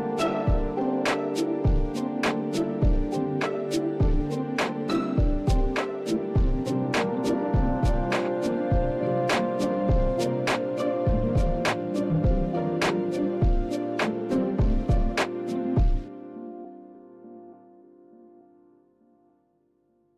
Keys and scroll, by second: 1.5-15.4 typing.